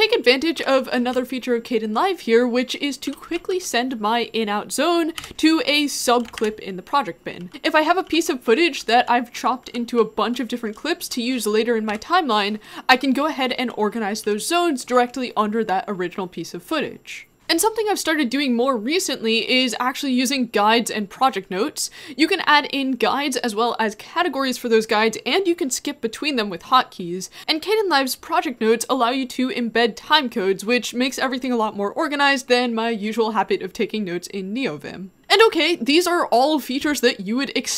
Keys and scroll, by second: 0.6-4.1 typing, 5.2 o, 6.4 ctrl+i, 7.4-11.5 typing, 11.9 Down, 12.9 shift+j, 13.2 shift+j, 13.4 shift+j, 14.2 shift+j.